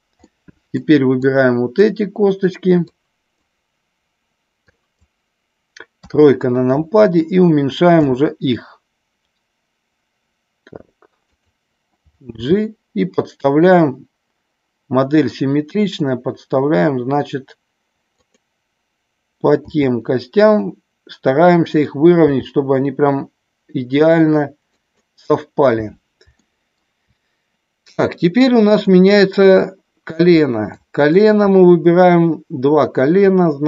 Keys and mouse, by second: 0.2 middle click, 1.3 click, 2.8 click, 4.6 click, 6.0 KP_3, 8.0 s, 11.3 click, 12.3 g, 18.1 click, 19.6 s, 21.4 click, 22.2 g, 24.7 click, 26.3 shift+middle click, 28.8 click, 30.7 shift+click.